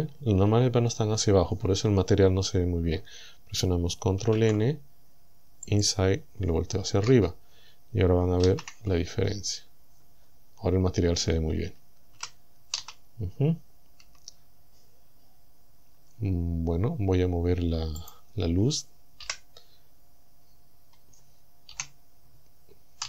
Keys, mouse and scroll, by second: 0.3 scroll down 2, 4.2 ctrl+n, 5.7 click, 7.1 KP_0, 8.5 shift+z, 12.2 z, 12.8 z, 14.1 Tab, 18.1 click, 19.3 KP_1, 20.5-20.8 scroll up 2, 20.8 scroll down 2, 21.7 KP_7.